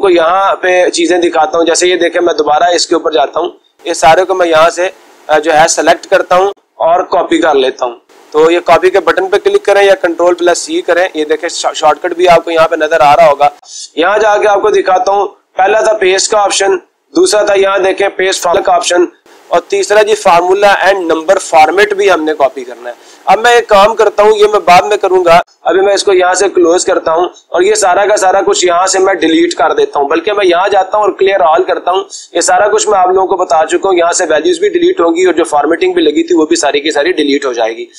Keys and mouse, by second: 0.6-1.7 drag, 1.9-3.8 drag, 4.4-5.4 drag, 7.1-8.1 drag, 10.3 ctrl+c, 14.1-15.2 drag, 25.7 Escape, 27.4 click, 28.9-29.9 drag, 31.5-32.6 drag, 33.2-34.3 drag, 34.7-36.5 drag.